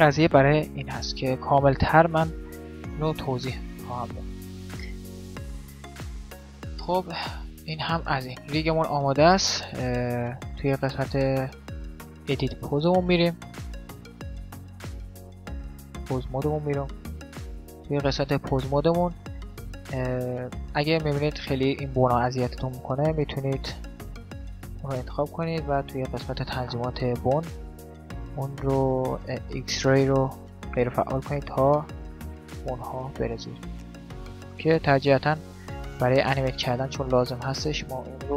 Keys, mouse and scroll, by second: 0.4 alt+r, 0.6 alt+g, 2.4 alt+s, 2.8-5.0 middle drag, 3.3-4.3 a, 4.9 Tab, 5.0 alt+g, 5.0 a, 6.2 a, 9.1 Tab, 10.5-14.9 middle drag, 16.5-22.1 middle drag, 22.3 middle click, 23.7 right click, 24.2-25.3 drag, 25.5 middle click, 25.6-27.3 drag, 27.5-29.6 middle drag, 29.7-31.6 drag, 30.7-36.6 middle drag.